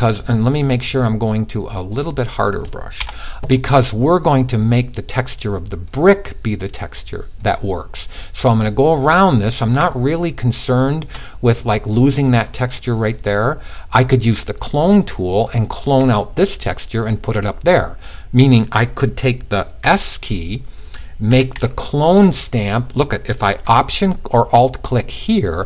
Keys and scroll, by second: 19.3 s, 20.8 ], 21.0 ].